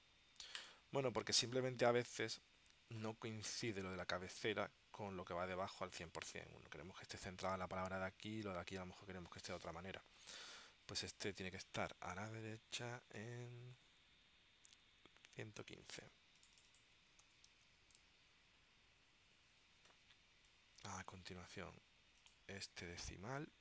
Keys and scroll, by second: 17.3 1, 17.6 5, 18.0 Tab.